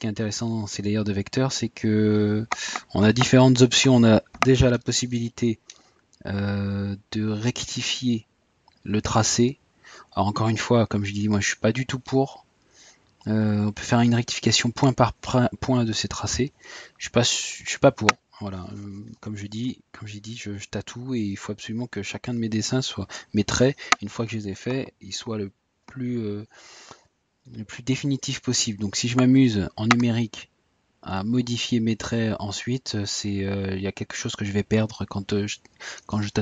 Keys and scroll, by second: 9.5 Tab, 12.2 Tab, 15.9 typing, 22.5 Tab, 29.7 typing.